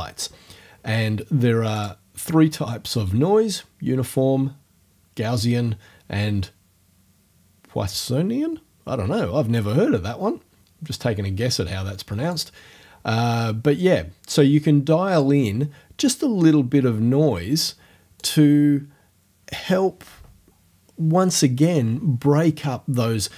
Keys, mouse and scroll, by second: 1.8 click, 12.3 click, 15.2-18.4 drag.